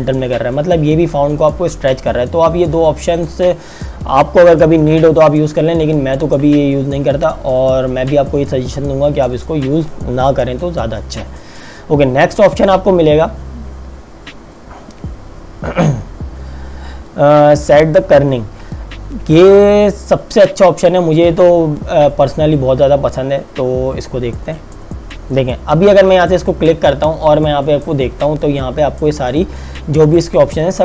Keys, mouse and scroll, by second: 2.7 click, 25.9 click.